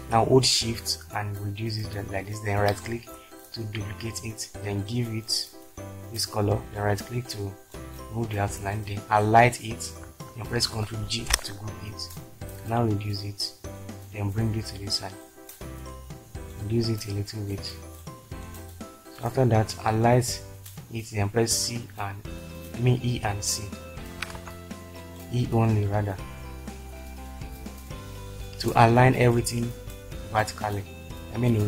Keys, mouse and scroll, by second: 11.1 ctrl+g, 21.9 e, 23.2 typing, 24.4 ctrl+z.